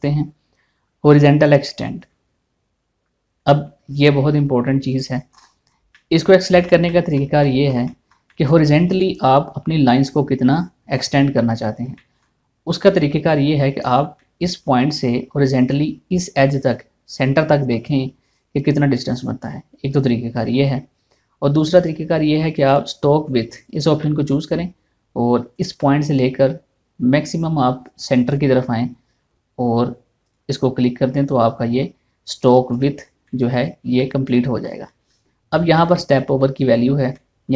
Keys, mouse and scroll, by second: 5.9 scroll down 1, 6.6 middle click, 8.0 shift+middle click, 12.4 shift+middle click, 12.6 shift+middle click, 13.5-13.9 scroll up 1, 14.8 shift+middle click, 23.3 click, 24.6 shift+middle click, 26.1 click, 30.9 click, 32.2 scroll down 1, 33.9 middle click, 35.4 middle click.